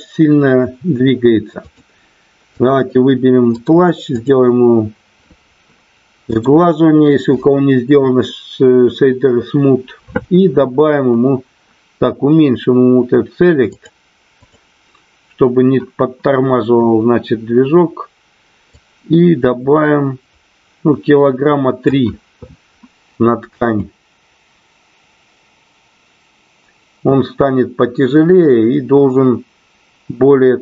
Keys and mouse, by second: 1.6 click, 3.5 right click, 6.3-9.4 right drag, 13.8 click, 18.8-21.9 drag, 23.4 space.